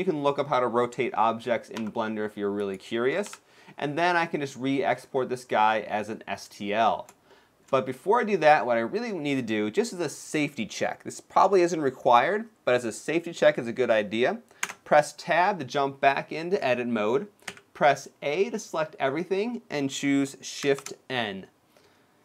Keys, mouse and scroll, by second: 1.5 r, 3.0 KP_7, 3.9 middle click, 4.7-5.3 scroll up 1, 5.3 middle click, 5.3-6.8 scroll up 1, 7.0 shift+middle click, 7.6 middle click, 15.0 Tab, 17.4 a, 21.4 shift+n.